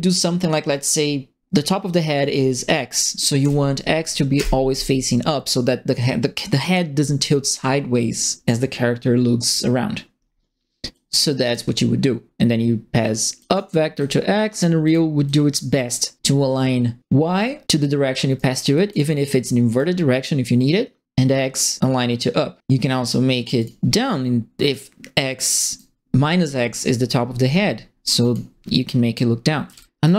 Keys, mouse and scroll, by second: 3.4 Down, 4.3 Return, 10.9 click, 13.3 click, 13.9 click, 14.8 click, 15.2 click, 18.3 right click, 18.7 click, 19.6 click, 23.5 click, 25.4 right click, 28.2 click, 29.6 KP_Subtract, 30.0 right click.